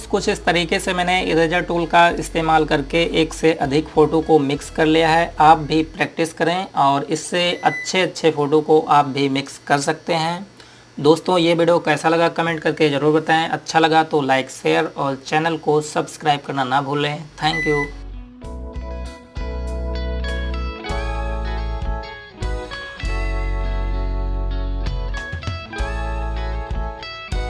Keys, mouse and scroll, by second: 26.5-27.2 typing.